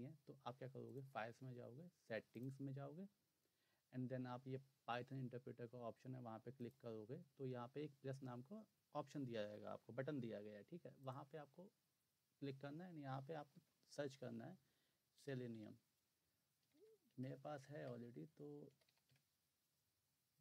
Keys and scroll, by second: 13.5 typing, 15.0-19.6 typing.